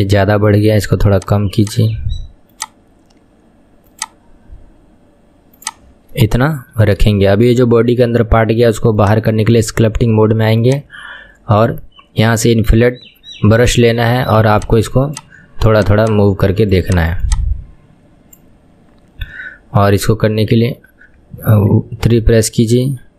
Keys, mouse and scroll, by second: 1.2-6.2 drag, 6.2-6.6 middle drag, 6.6 KP_1, 6.8-7.2 scroll down 2, 7.2-9.2 shift+middle drag, 9.2 click, 10.7-20.3 drag, 21.9 KP_3.